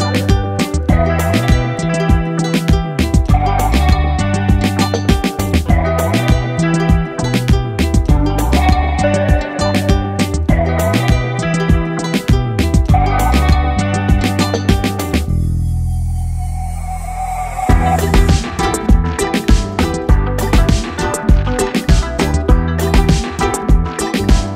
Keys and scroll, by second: 1.0 Return.